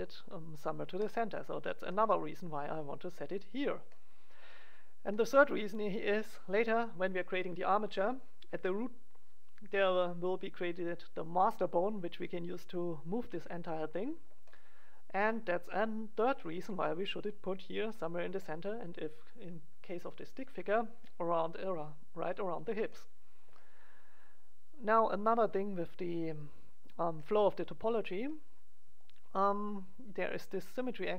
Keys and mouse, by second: 0.9-2.1 drag, 2.1-8.1 middle drag, 14.4 middle click, 26.3 click, 27.1-28.3 middle drag, 28.9-31.1 right drag.